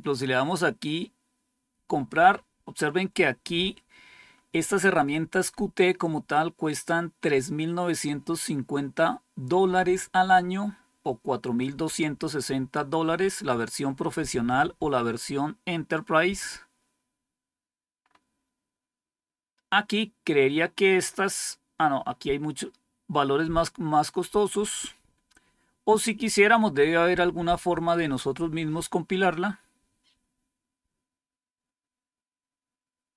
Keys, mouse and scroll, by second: 3.0-4.0 scroll down 3, 5.6-7.0 scroll down 3, 16.4-17.9 scroll down 2, 17.9-18.8 scroll up 2, 22.0-22.8 scroll down 2, 24.0-26.5 scroll down 5, 26.5-27.6 scroll up 4, 30.1-32.4 scroll down 5, 32.7-33.1 scroll down 3.